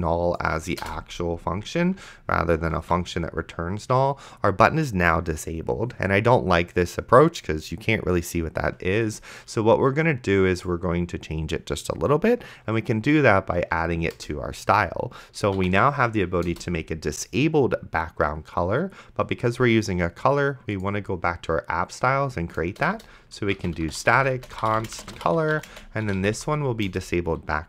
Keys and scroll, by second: 0.8 BackSpace, 3.1 ctrl+s, 14.4 Return, 15.2-16.3 typing, 16.5 Return, 23.0 Return, 23.2-26.9 typing, 26.9 Return.